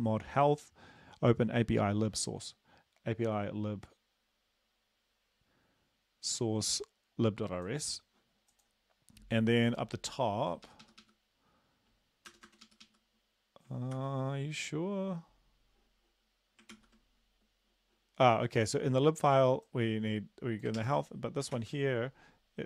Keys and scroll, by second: 10.7 Up, 10.9 Up, 11.0 Up, 12.3 Return, 12.5 Return, 12.6 Up, 12.8 Up, 14.0 ctrl+v, 16.7 ctrl+s, 20.8 ctrl+x, 21.6 ctrl+s.